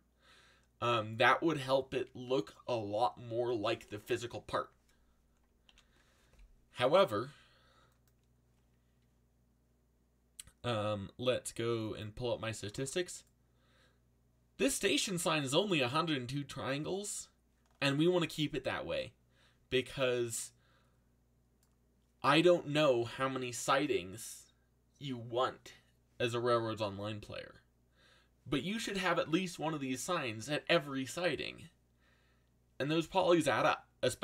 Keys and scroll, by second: 5.6 ctrl+l.